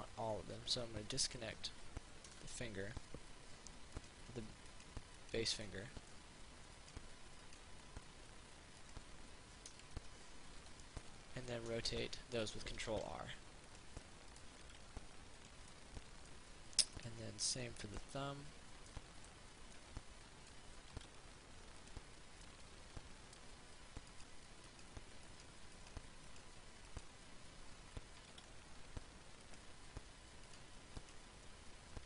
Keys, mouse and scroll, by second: 2.5 a, 4.2 right click, 5.9 middle click, 7.0 right click, 9.0 click, 9.9 a, 10.8 l, 11.2 middle click, 13.2 ctrl+r, 13.9 click, 14.2 middle click, 15.0 ctrl+r, 15.6 click, 16.0-17.0 middle drag, 17.2 right click, 17.7-21.0 middle drag, 21.0 ctrl+r, 22.0 click, 22.7-24.1 middle drag, 24.4 right click, 28.6 ctrl+r, 29.6 click, 30.8 right click.